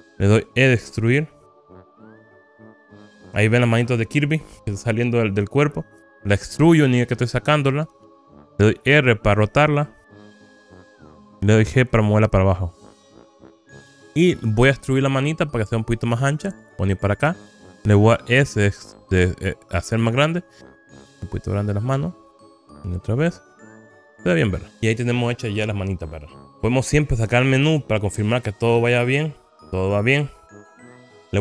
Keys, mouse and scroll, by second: 1.1 e, 8.4 click, 9.5 r, 11.5 click, 12.2 g, 15.6-17.3 middle drag, 17.6 Escape, 17.6 ctrl+z, 19.3 s, 22.7 click, 23.5 KP_1, 24.2 click, 27.7 n, 29.3 click, 29.5-30.6 click.